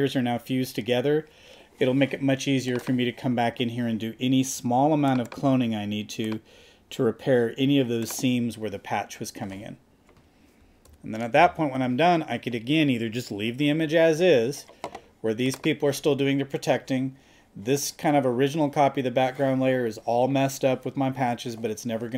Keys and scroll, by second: 10.9 super+-.